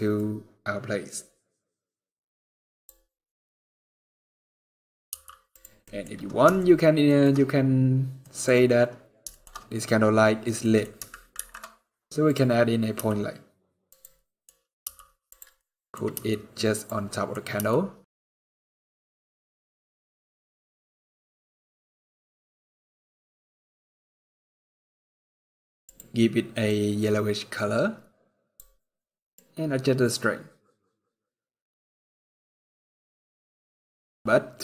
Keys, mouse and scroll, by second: 2.8 scroll down 2, 4.8 g, 5.6 middle click, 6.3 shift+middle click, 6.9 middle click, 7.0 scroll up 4, 7.2 scroll down 1, 7.5-7.8 scroll up 1, 7.9 middle click, 8.3 scroll up 1, 9.0 shift+middle click, 9.3 scroll up 3, 9.9-10.6 scroll down 3, 10.3 middle click, 10.6 scroll up 1, 11.1 shift+a, 12.7 g, 14.0 middle click, 14.3 scroll down 1, 14.6 g, 15.4 middle click, 15.8 scroll down 1, 15.9 g, 16.9 middle click, 17.1 scroll up 3, 17.4 g, 18.4 middle click, 18.9 g, 25.7 click, 29.1 click.